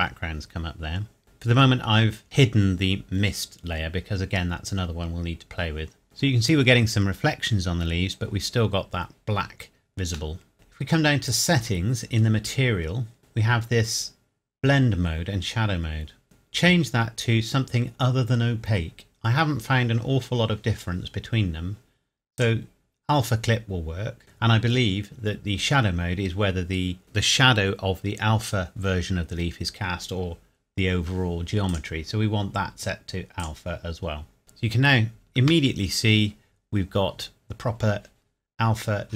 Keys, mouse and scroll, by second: 6.8 scroll up 1, 8.5 scroll down 1, 9.8-10.4 scroll up 1, 10.4 middle click, 11.3 click, 13.2-13.6 scroll down 1, 16.2 click, 22.4 click, 31.7 click, 34.4-35.4 scroll down 1, 35.4 KP_0, 37.6 scroll up 1.